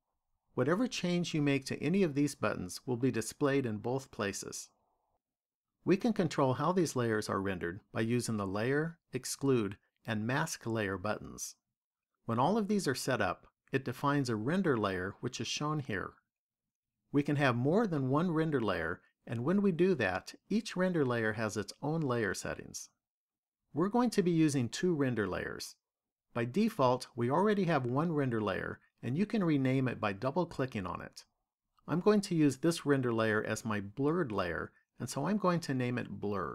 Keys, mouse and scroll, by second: 3.0 click, 4.2 click, 31.3 click, 31.5 click.